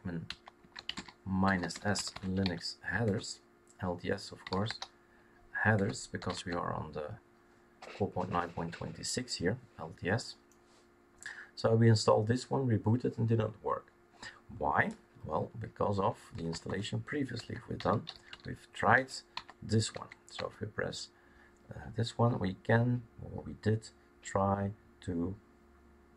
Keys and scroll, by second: 0.0-3.0 typing, 4.1-6.1 typing, 6.3 Tab, 14.9-19.3 typing, 19.9 Tab, 20.3 Tab.